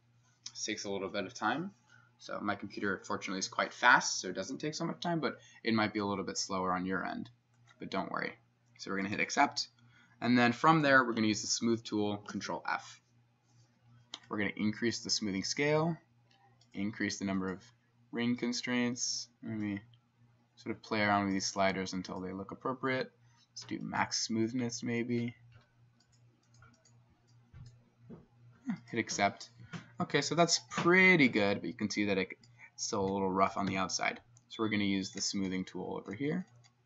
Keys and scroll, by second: 12.4 ctrl+f, 30.1 Escape, 33.8 2.